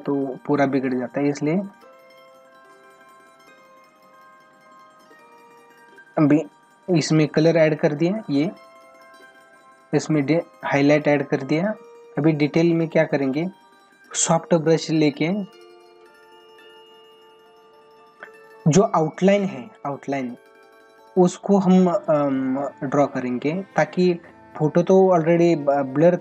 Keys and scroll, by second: 18.9 ctrl+=, 23.0 space.